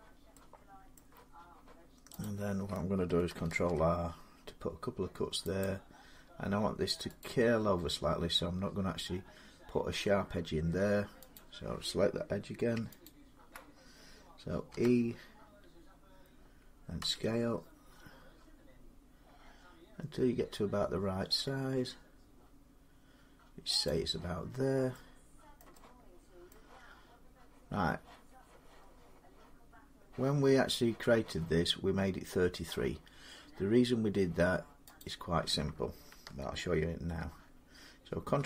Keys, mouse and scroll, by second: 0.8 middle click, 2.1 click, 3.3 ctrl+r, 4.4 scroll up 1, 5.5 click, 7.0 right click, 11.2 click, 12.9 alt+click, 14.5 e, 16.8 s, 18.0 alt+click, 23.7-25.4 drag, 25.4 middle click, 26.3 middle click, 34.8 click, 38.2 ctrl+r.